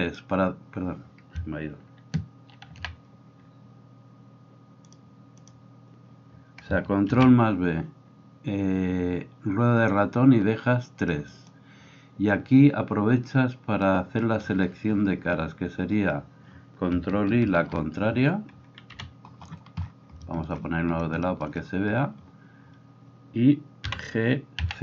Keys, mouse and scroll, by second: 7.1 ctrl+b, 11.1 middle click, 11.3 click, 11.5-13.9 middle drag, 13.9-24.8 drag, 17.4 ctrl+i, 18.9 KP_3, 23.9 g.